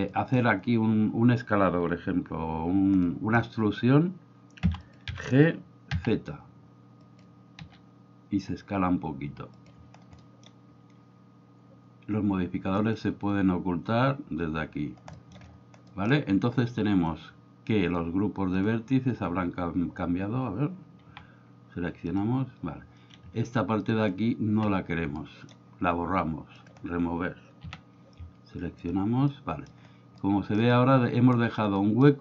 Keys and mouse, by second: 0.1 shift+middle click, 3.0-3.4 middle drag, 4.6 e, 4.8 click, 5.9 z, 7.1 click, 7.6 s, 9.5 click, 10.2 middle click, 12.8 click, 15.2 shift+middle click, 15.9 middle click, 18.6 drag, 21.1 a, 22.0 click, 23.9 alt+right click, 25.1 middle click, 27.7 a, 28.7 click, 29.3 middle click, 30.1 middle click, 31.7 middle click.